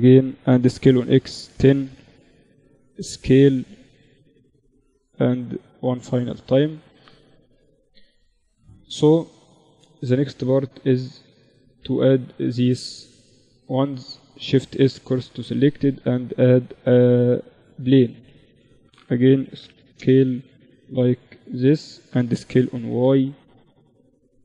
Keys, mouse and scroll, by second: 2.0 s, 3.5-8.5 drag, 5.5-8.1 right drag, 8.6-9.9 drag, 13.2 shift+s, 14.4 shift+a, 18.1 s, 19.7-22.2 middle drag, 21.5 s, 23.1-24.4 drag.